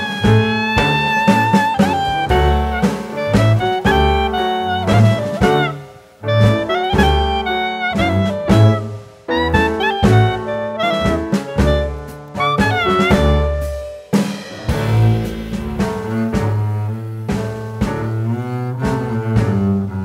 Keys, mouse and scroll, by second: 5.3 s, 8.5 scroll down 1, 8.6 middle click, 9.4-10.7 scroll down 2, 12.4 click, 12.7 shift+middle click, 13.5 click, 14.6 scroll up 2, 15.0 click, 17.3 click, 19.6 s.